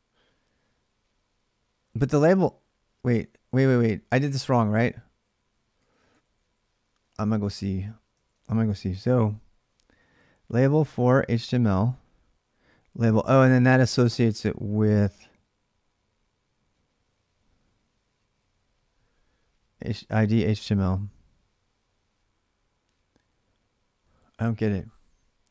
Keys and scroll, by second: 2.8-6.0 typing, 6.0 ctrl+a, 6.2 ctrl+a, 8.5 ctrl+a, 8.5 6.